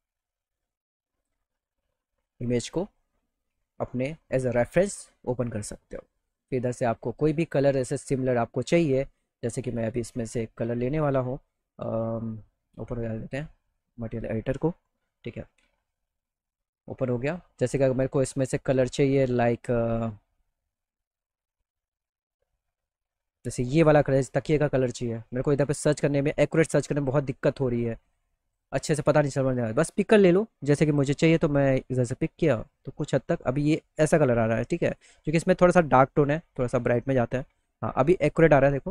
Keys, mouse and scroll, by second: 0.8 click, 1.7 click, 3.9 click, 6.2 click, 9.0 middle click, 16.7 middle click, 17.3 middle click, 18.3 click, 19.9 middle click, 20.5 middle click, 21.0 middle click, 21.8 middle click, 22.2 middle click, 22.6 middle click, 23.0 middle click, 25.4 click, 26.0 click, 26.5 click, 29.3 click, 31.3 click, 34.5 click, 36.4 click.